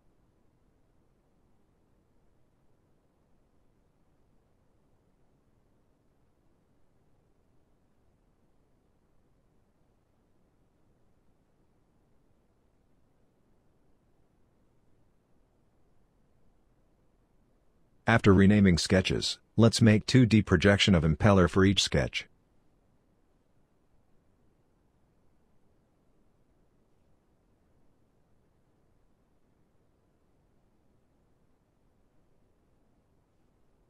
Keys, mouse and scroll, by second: 3.2 right click, 21.4 scroll down 1, 21.9 right click, 22.5 scroll down 1.